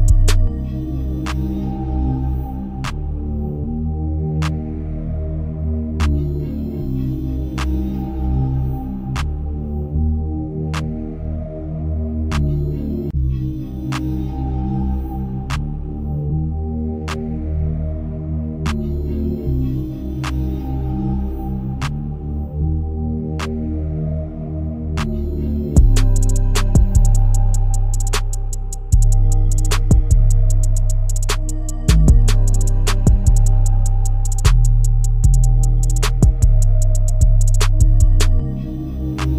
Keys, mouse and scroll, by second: 4.4 KP_0, 6.6 click, 7.2-10.2 scroll up 1, 10.2 click, 11.6 click, 13.3 click, 14.5-15.7 drag, 15.7 KP_1, 17.8 click, 18.2-19.6 scroll down 4, 19.6-23.6 middle drag, 23.6 click, 24.2 click, 24.7 g, 27.9 click, 29.7 click, 30.5 KP_0, 31.1 KP_1, 31.7-32.2 scroll up 5, 32.2-32.7 shift+middle drag, 32.7-33.2 scroll up 1, 33.2 n, 35.0 click, 35.9 click, 38.5 click.